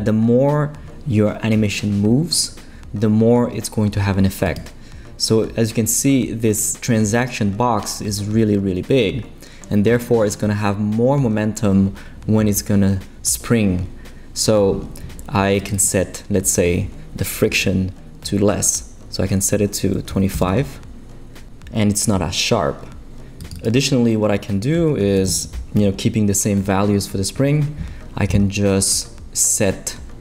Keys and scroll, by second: 19.9-20.8 typing, 24.8 l, 25.2 5, 25.3 Return.